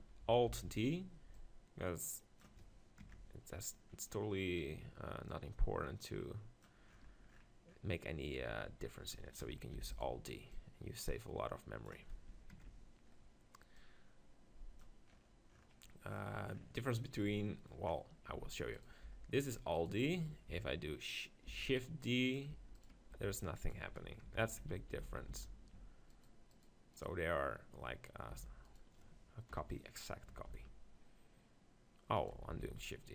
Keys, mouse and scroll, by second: 0.5 alt+d, 0.9-2.8 right drag, 1.4-3.2 drag, 4.0-5.3 middle drag, 5.3-7.1 drag, 7.1 middle click, 9.8 alt+d, 10.5-12.0 drag, 10.5-12.0 right drag, 12.0 click, 13.8-15.7 drag, 15.7 middle click, 17.2-20.1 middle drag, 18.4 Tab, 18.8-20.1 drag, 19.1 g, 20.1 Tab, 20.1-21.7 right drag, 21.5 shift+d, 21.8-23.6 right drag, 22.1-23.8 drag, 22.5 Tab, 23.1 g, 23.6 middle click, 24.0 right click, 24.3 Tab, 24.8-25.4 ctrl+z, 26.2-28.7 right drag, 28.3 g, 29.5 KP_7, 30.5 shift+d, 32.6 ctrl+z.